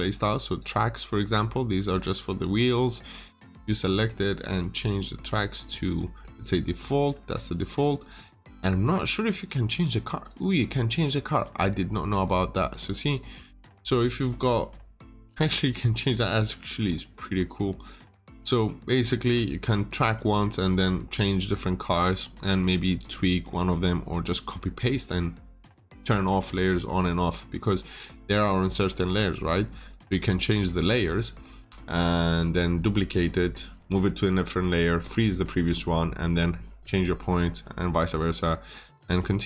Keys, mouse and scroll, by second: 0.4 click, 1.3 Escape, 3.0 click, 3.3 double click, 4.3 click, 7.1 Escape, 7.7 click, 7.9 double click, 9.3 click, 10.2 double click, 11.2 click, 13.5 double click, 15.0 click, 18.8-19.4 scroll down 2, 19.0 middle click, 20.6 middle click, 22.1 scroll down 1, 22.5 middle click, 28.1 click, 30.6 middle click, 37.7 scroll down 1, 37.9 middle click, 38.3 scroll down 1, 38.8 middle click.